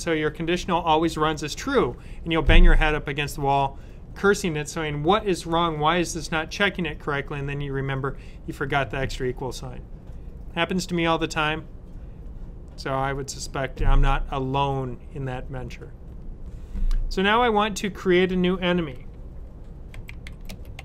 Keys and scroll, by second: 19.6-20.8 typing.